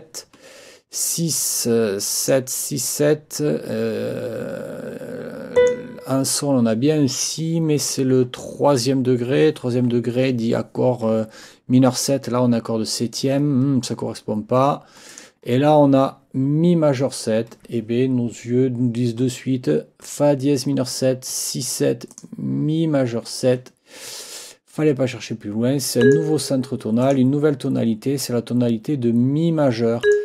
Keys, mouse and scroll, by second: 1.5-2.5 drag, 5.6 click, 15.1 click, 20.0 click, 21.3 ctrl+click, 22.1 ctrl+click, 26.0 click, 27.0 click, 30.0 click.